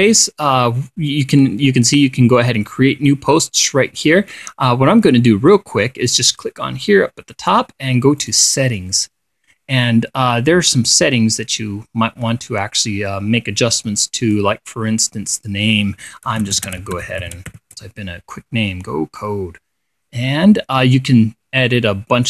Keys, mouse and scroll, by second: 6.8 click, 8.7 click, 11.2-15.1 drag, 15.9 click, 16.6-18.5 typing, 19.7-22.2 drag.